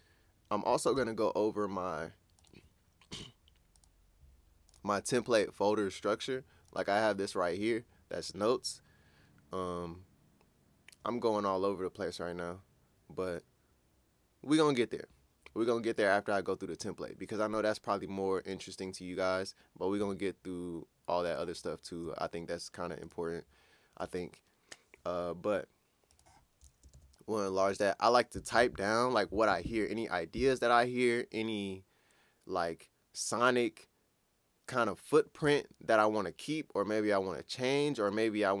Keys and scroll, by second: 1.0 super+Tab, 20.0 super+Tab, 26.9 ctrl+Up.